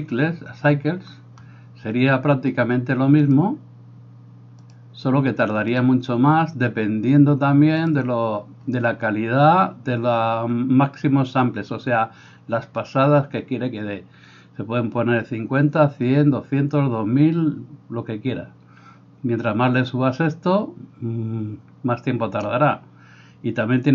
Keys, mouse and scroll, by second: 3.3 click, 4.8-23.9 drag.